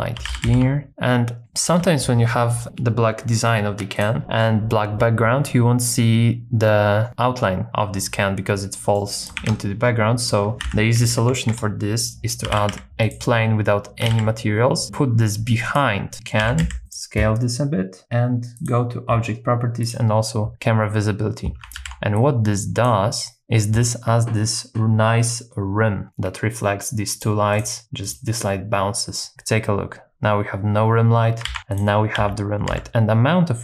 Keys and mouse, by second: 0.2 g, 0.3 z, 0.5 z, 1.5 shift+middle click, 4.0 click, 4.2 middle click, 8.8 middle click, 9.2 click, 9.4 shift+a, 10.6 r, 11.0 KP_9, 11.2 KP_0, 11.6 KP_Enter, 12.5 g, 12.7 z, 13.1 click, 14.0 g, 14.1 z, 15.7 click, 16.1 middle click, 16.4 s, 16.7 x, 16.9 click, 19.8 click, 21.8 ctrl+b, 23.3 shift+middle click, 28.1 click, 29.3 h, 31.5 super+z, 31.7 click, 32.2 s, 32.7 x.